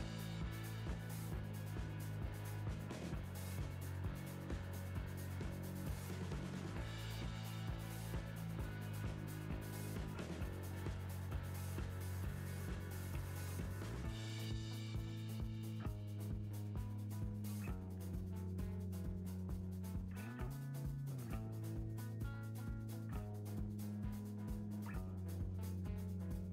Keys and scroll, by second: 5.7 Tab, 17.7 Return.